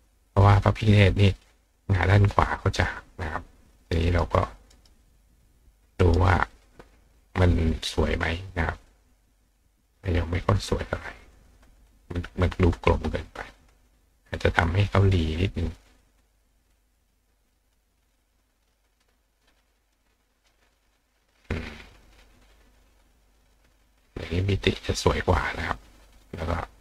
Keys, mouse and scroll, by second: 4.0 right click, 4.7 right click, 6.0 right click, 7.5 click, 8.0 click, 8.5 click, 9.9 click, 10.6 click, 11.2 click, 12.1 click, 13.6 click, 14.3 click, 16.4 click, 19.9 click, 21.3 click, 21.9 click, 23.8 click, 25.1 click, 26.4 click.